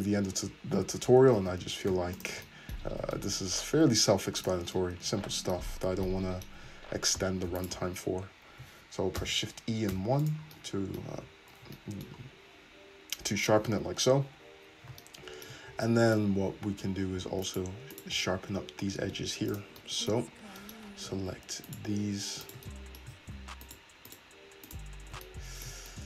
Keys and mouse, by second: 1.4 shift+e, 2.8 Tab, 4.4 click, 6.6 Tab, 7.6 alt+click, 9.2 shift+e, 11.1 Tab, 14.8-15.9 shift+middle drag, 15.7 Tab, 15.9 click, 16.3-17.4 middle drag, 17.4 alt+click, 17.6 alt+middle click, 17.9 alt+click, 18.0-19.5 alt+middle drag, 19.5 click, 19.8-21.7 middle drag, 21.7 shift+click, 21.8 shift+middle click, 22.5 shift+click, 22.6-23.6 middle drag, 23.6 alt+shift+click, 24.1 alt+shift+click, 24.7 alt+shift+click, 25.1 middle click.